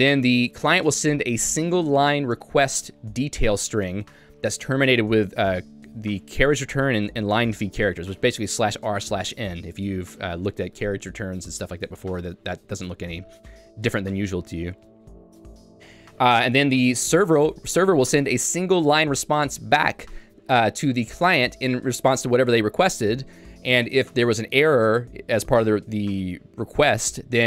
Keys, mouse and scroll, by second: 10.8 Escape, 11.7 j, 12.6 Escape, 12.9 k, 14.9 j.